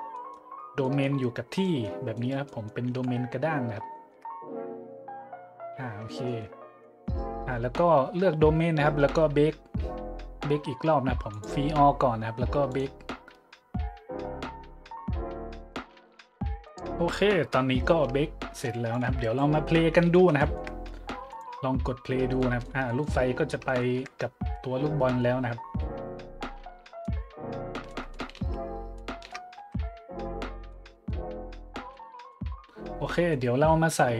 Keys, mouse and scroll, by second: 0.1-0.5 middle drag, 0.8-1.1 middle drag, 1.6-1.9 middle drag, 2.1-2.5 right drag, 2.5 middle drag, 2.9 `, 3.5 middle click, 3.9 shift+middle click, 6.1-6.8 shift+middle drag, 7.0-7.4 middle drag, 8.1 middle click, 8.9 middle click, 9.2 middle click, 11.3-11.6 drag, 12.7 click, 18.9 click, 19.9 middle click, 20.4-20.7 shift+middle drag, 21.3 click, 22.4-22.7 middle drag, 22.8-23.2 middle drag, 23.2 `, 25.8-27.0 middle drag, 28.4 shift+z, 29.0-29.3 shift+middle drag, 29.3 drag, 29.6 z, 30.7-31.1 middle drag, 31.9-32.3 middle drag, 33.1 middle click.